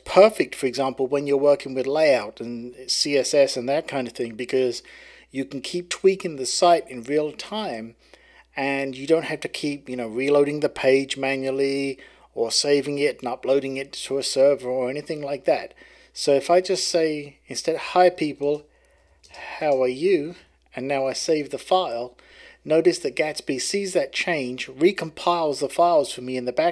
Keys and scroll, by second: 18.4-21.8 typing.